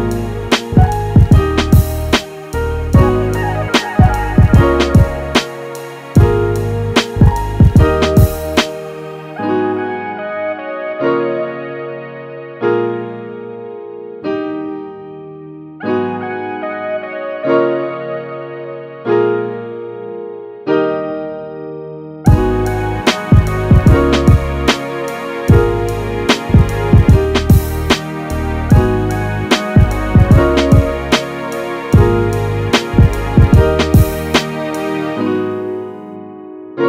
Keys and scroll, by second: 2.5 super+z.